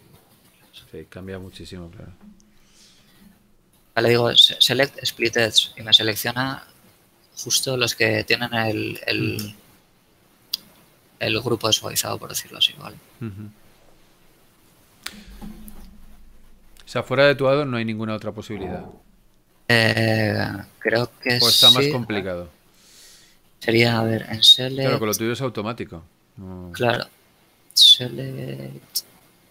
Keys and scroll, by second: 2.2 ctrl+shift+a, 7.2 z, 10.8 z, 14.2 Tab, 20.2 shift+Tab, 21.8 a.